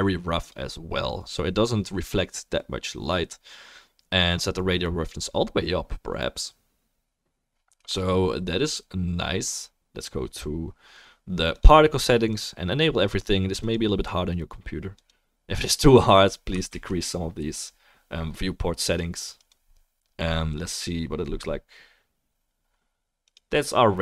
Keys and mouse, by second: 15.9 click, 15.9 middle click, 17.1 ctrl+s, 18.4-20.2 drag, 18.4-20.2 middle drag, 23.2 click, 23.2 middle click.